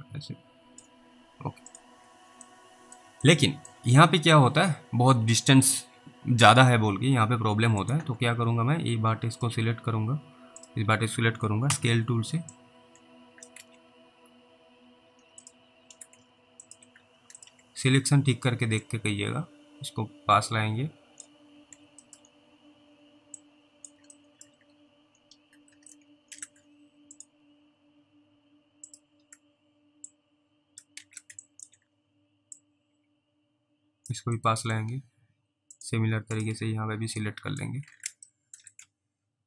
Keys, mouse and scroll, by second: 1.7 click, 2.8 middle click, 3.6 alt+middle click, 4.0 scroll up 1, 4.5 scroll down 1, 7.9 click, 10.6 ctrl+click, 11.7 r, 12.8 click, 13.4 click, 13.6 ctrl+z, 13.9 scroll up 1, 15.4 ctrl+click, 16.7 alt+click, 17.4 ctrl+click, 17.7 scroll down 1, 19.1 click, 21.6 scroll up 1, 22.1 alt+middle click, 22.2 scroll down 1, 23.7 click, 24.5 alt+middle click, 24.6-25.1 scroll up 1, 25.1 scroll down 1, 26.2 ctrl+alt+middle click, 27.2 ctrl+click, 30.4 click, 31.0 ctrl+z, 31.7 alt+click, 32.9 click, 34.7 alt+middle click, 35.8 click, 36.4 ctrl+click, 37.5 middle click, 38.6 ctrl+alt+middle click.